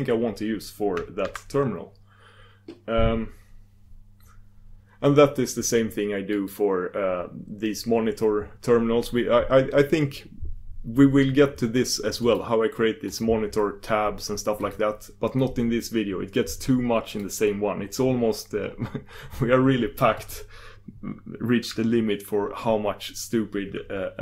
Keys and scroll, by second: 1.2 super+q, 1.3 super+q.